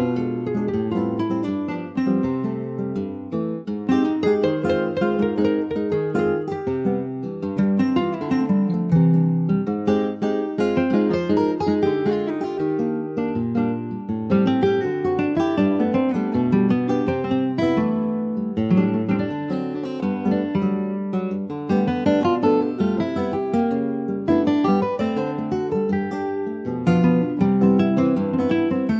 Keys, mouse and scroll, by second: 0.4 alt+shift+click, 1.1 alt+shift+click, 1.6 middle click, 2.1 e, 2.7 alt+s, 4.8 middle click, 5.2 scroll up 2, 5.4-7.1 shift+middle drag, 7.1 ctrl+s, 7.6 2, 7.8 click, 8.5 alt+shift+click, 9.0 middle click, 9.4 ctrl+b, 13.2 Tab, 13.4 click, 13.6-14.4 scroll down 8, 13.8 middle click, 14.4 shift+middle click, 15.2 ctrl+s, 15.2 click, 15.6 shift+middle click, 16.2 ctrl+s, 16.5-17.0 scroll down 2, 17.0 ctrl+s, 17.0 click, 17.3 alt+middle click, 17.8-18.6 alt+scroll up 1, 18.6 scroll up 1, 18.9 ctrl+s, 19.1 alt+middle click, 19.7 ctrl+s, 19.9 click, 20.4-21.5 shift+middle drag, 21.5 ctrl+a, 23.6 click, 28.0-28.6 scroll up 3, 28.6 shift+middle click.